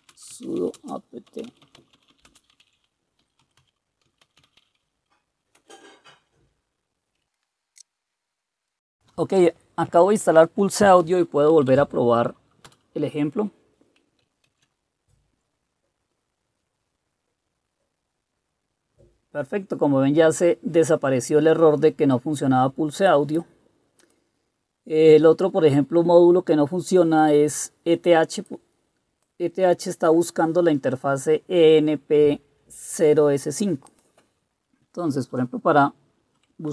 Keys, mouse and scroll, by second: 0.0-5.1 typing, 5.6 Return, 7.3 Return, 11.6 Up, 11.8 Up, 12.8 Return, 14.6 ctrl+c, 35.4 Up.